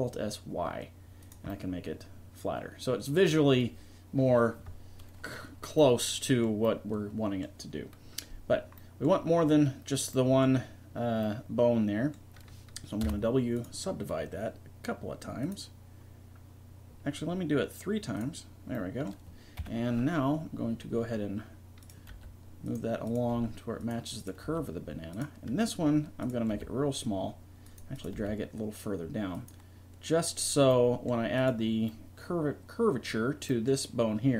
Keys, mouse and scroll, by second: 1.5-4.1 middle drag, 5.9 middle click, 6.9-8.2 middle drag, 11.3-13.0 middle drag, 13.0 w, 15.4-17.2 drag, 18.2 click, 18.7 middle click, 19.6 KP_3, 22.1 g, 23.3 g, 24.5 g, 26.5 g, 28.2 g, 32.2-33.4 drag.